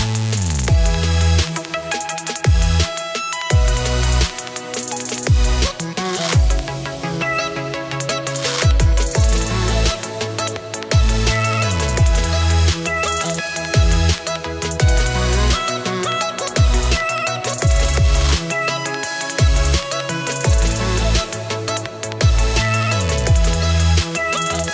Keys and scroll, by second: 2.0 space, 3.0 space, 4.8 -, 5.8 space, 8.3 space, 8.4 -, 10.4 space, 12.1 -, 12.2 space, 12.7 -, 20.9 +, 21.0 space, 23.5 -.